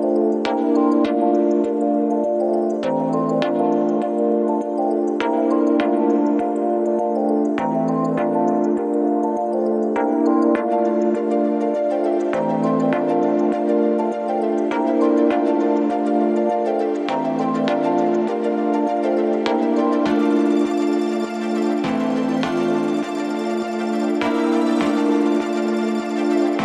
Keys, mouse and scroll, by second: 12.7 double click.